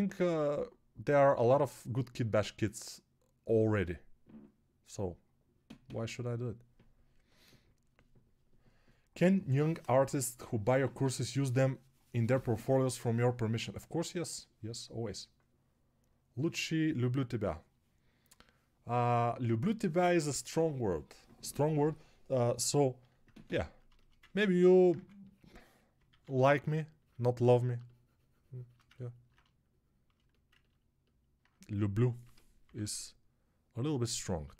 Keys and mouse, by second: 24.8 2, 26.0 alt+q, 32.1 g, 32.5 [, 32.7 [, 32.8 [.